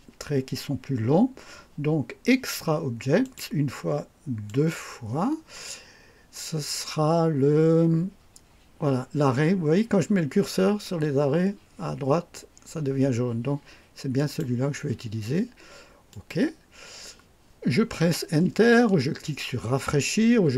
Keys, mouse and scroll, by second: 3.2 click, 4.5 click, 14.2 click, 16.1 click.